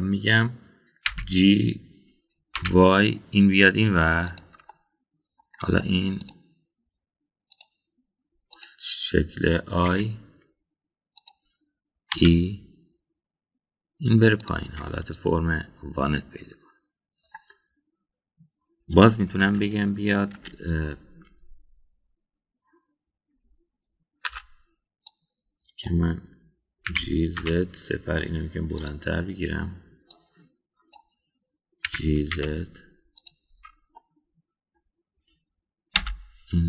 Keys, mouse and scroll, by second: 2.1 g, 5.6 middle click, 7.2 click, 8.5 click, 9.6 click, 10.9 i, 13.1 e, 15.9-18.3 middle drag, 20.4 KP_1, 21.3 KP_3, 25.3 1, 26.1 click, 27.9 g, 31.1-32.0 drag, 32.8 g, 34.5 Tab, 35.0-35.8 middle drag.